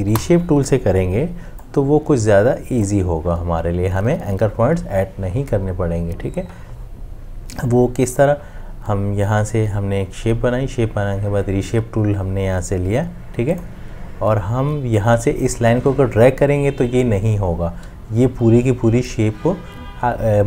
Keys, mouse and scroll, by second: 0.1 Delete, 1.1 m.